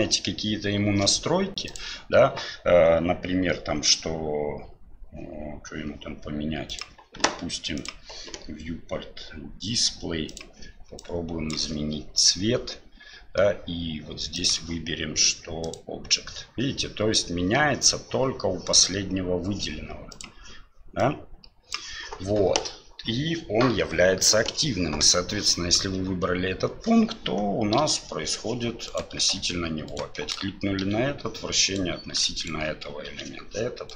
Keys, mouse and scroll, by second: 6.7-7.9 drag, 14.4-16.3 drag, 20.1 click, 27.8 r, 29.9 shift+right click, 32.3 shift+right click, 33.1 r.